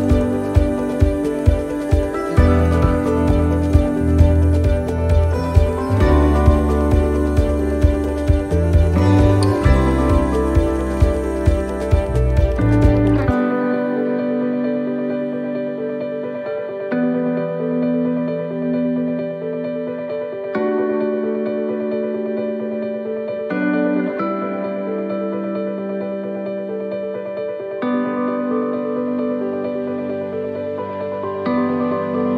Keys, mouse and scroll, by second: 0.1 middle click, 1.5 middle click, 2.1 middle click, 3.7 scroll up 3, 4.1 middle click, 6.5 scroll up 1, 6.5 middle click, 7.1 middle click, 9.2 middle click, 9.2 right click, 10.7 l, 12.2 l, 17.8 middle click, 18.7 middle click, 20.4 s, 24.4 middle click, 31.2 middle click, 31.2 s.